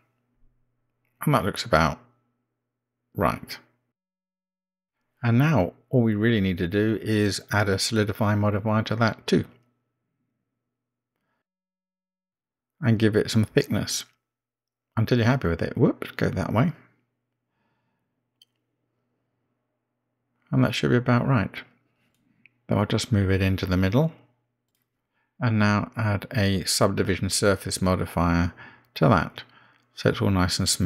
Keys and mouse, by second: 1.9-3.9 middle drag, 6.8 Tab, 9.0-11.8 drag, 12.7-13.5 middle drag, 15.0-17.7 drag, 18.9-19.5 middle drag, 22.1 g, 22.1 g, 25.0-26.3 middle drag, 28.6-30.5 drag.